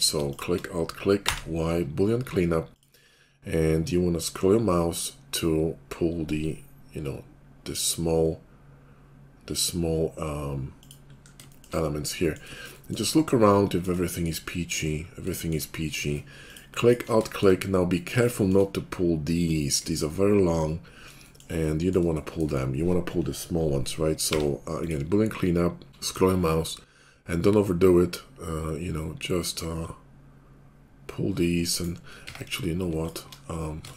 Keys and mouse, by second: 1.1 y, 2.9-12.4 drag, 12.4 middle click, 12.7 shift+click, 13.0-14.0 middle drag, 14.0 shift+click, 14.3-15.3 middle drag, 15.3 shift+click, 15.6-16.8 middle drag, 16.8 alt+click, 17.0 middle click, 17.1 click, 17.4 middle click, 18.3 click, 18.6-19.8 middle drag, 19.8 click, 20.0-21.2 middle drag, 21.2 shift+click, 22.0 shift+click, 24.2 y, 32.2 Tab, 32.2 middle click, 32.9 alt+click, 33.2-33.9 middle drag.